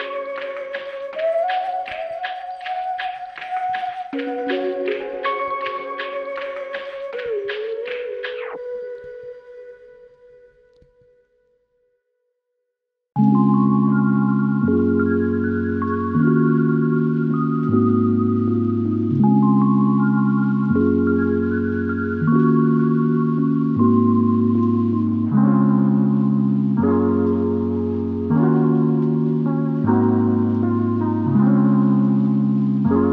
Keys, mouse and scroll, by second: 3.6 w, 5.4 alt+click, 14.6 s, 25.8 ctrl+click, 28.2 ctrl+click, 31.2 ctrl+click.